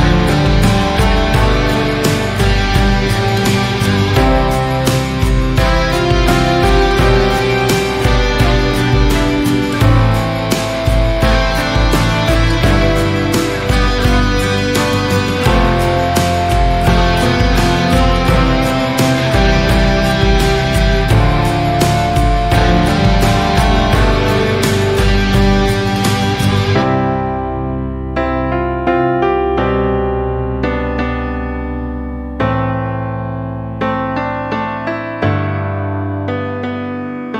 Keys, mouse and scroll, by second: 0.1-1.1 shift+middle drag, 1.1 shift+click, 2.7 shift+click, 4.3 shift+click, 5.8 shift+click, 6.7-8.4 shift+middle drag, 8.4 shift+click, 10.2 click, 10.6 scroll down 1, 11.0-12.4 shift+middle drag, 12.4-14.1 scroll up 1, 14.1 shift+click, 15.2-16.3 shift+middle drag, 16.3 shift+click, 17.8-18.9 shift+middle drag, 18.9 shift+click, 21.3 shift+click, 22.1-23.6 shift+middle drag, 23.6 shift+click, 24.6-26.1 shift+middle drag, 26.1 shift+click, 27.0-28.2 shift+middle drag, 28.2 shift+click, 29.1-30.6 shift+middle drag, 30.6 shift+click, 31.5 shift+middle click, 32.3 shift+click, 33.1-34.3 shift+middle drag, 34.3 shift+click.